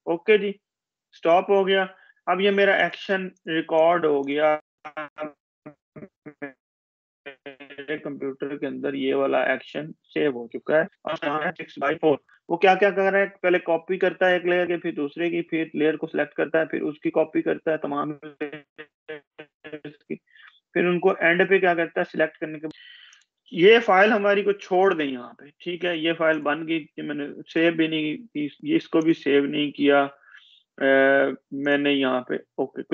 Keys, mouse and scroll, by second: 8.9 click, 11.8-12.2 scroll down 1, 14.9-15.3 scroll up 1, 15.4-16.7 scroll down 1, 21.7-23.2 scroll down 1, 26.9 click.